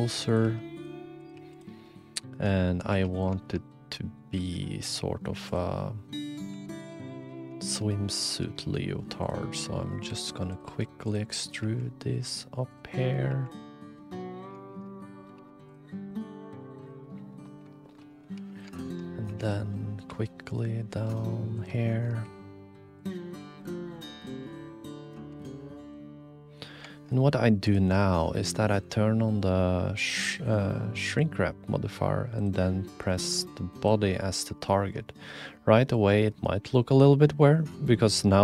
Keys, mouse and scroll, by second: 0.0-0.4 typing, 1.2 click, 1.5 g, 2.2 shift+middle click, 2.6 click, 2.9 2, 3.1 click, 3.4 shift+middle click, 3.7 middle click, 4.3 e, 5.7 middle click, 6.5 e, 7.6 shift+middle click, 7.9 click, 9.5 click, 9.5 e, 10.1 r, 10.6 g, 11.6 e, 13.0 click, 13.3 e, 14.2 click, 14.5 shift+middle click, 14.7 shift+click, 14.9 click, 15.3 2, 15.6 click, 15.9 click, 16.2 g, 17.4 click, 17.9 shift+click, 18.3 2, 18.5 click, 18.8 shift+middle click, 19.2 2, 19.7 click, 20.0-21.6 middle drag, 20.1 e, 21.9 shift+click, 22.2 e, 23.4 click, 24.0 middle click, 24.2 e, 25.3 r, 26.2 middle click, 28.3-31.2 drag, 34.5 shift+middle click, 35.1 middle click, 36.6-37.0 middle drag.